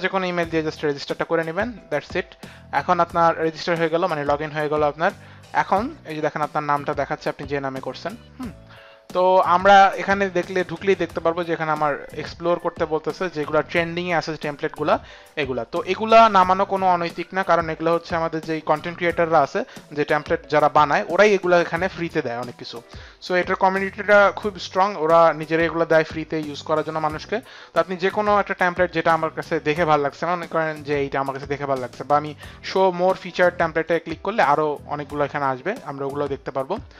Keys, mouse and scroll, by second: 2.0 click, 33.8 click.